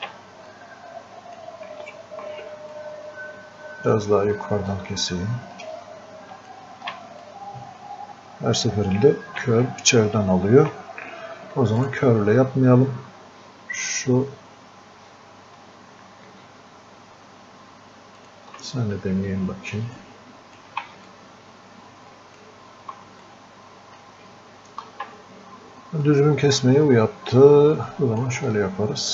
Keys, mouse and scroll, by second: 0.6-2.8 drag, 2.8-4.8 drag, 4.8 ctrl+shift+click, 5.8 ctrl+shift+space, 7.3-9.5 drag, 9.5 ctrl+z, 11.8 ctrl+shift+click, 18.2 ctrl+shift+click, 19.3 ctrl+shift+click, 20.2 click, 21.4-22.7 ctrl+shift+drag, 23.6 click, 26.1-29.1 drag.